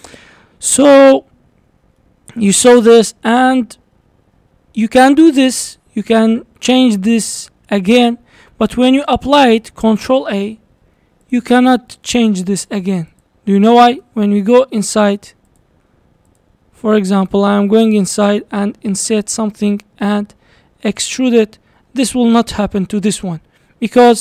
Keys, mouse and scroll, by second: 0.9 Tab, 1.3-2.0 scroll up 3, 2.0-5.0 shift+middle drag, 5.6 Tab, 6.0 click, 6.9 e, 8.2 Tab, 9.5 click, 10.2 ctrl+a, 11.3 click, 11.7 click, 12.2 click, 12.7 click, 13.1 click, 14.0 Tab, 15.5 click, 16.3 click, 17.0 scroll up 1, 17.9 click, 18.7 i, 20.3 e, 21.2 scroll down 2, 22.4 Tab.